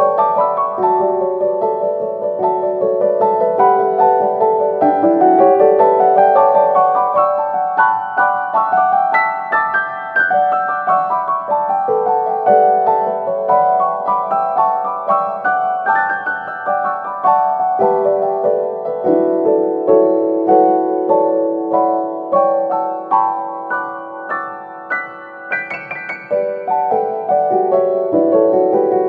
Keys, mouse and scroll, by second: 1.0 middle click, 1.5 Tab, 4.0 click, 4.6 shift+click, 5.0 shift+click, 6.1 x, 9.3-10.2 scroll up 3, 10.4 click, 12.3 p, 13.3 p, 15.3 Tab, 16.0 click, 17.1 click, 20.1 click, 21.5 click, 21.7 click, 22.2 BackSpace, 23.1 o, 24.2 click, 25.4 click, 26.0-27.9 middle drag, 27.9-29.0 drag.